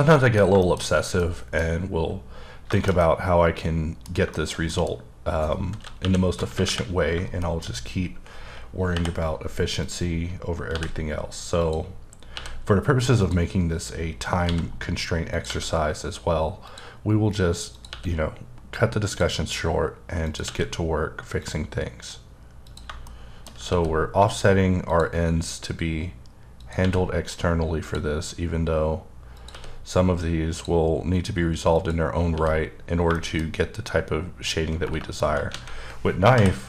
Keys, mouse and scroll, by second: 0.2 middle click, 2.0-2.4 scroll down 6, 2.7 shift+middle click, 4.9-6.0 scroll up 1, 6.0 KP_1, 6.5 KP_8, 6.6 KP_8, 7.4 shift+middle click, 7.7-8.2 shift+scroll up 4, 8.9 k, 9.8 click, 10.7 c, 11.6 click, 12.3 e, 13.2 click, 14.4 c, 15.3 click, 15.5 e, 16.7 click, 17.7 click, 17.9 e, 19.1 click, 20.2 click, 20.4 e, 21.4 click, 22.6 click, 23.0 shift+middle click, 23.6 e, 24.9 click, 26.6 click, 26.8 e, 27.8 click, 29.3 click, 29.5 e, 30.5 click, 31.7 click, 32.3 e, 33.2 shift+middle click, 34.8 KP_Enter, 35.5 alt+a, 36.3 k.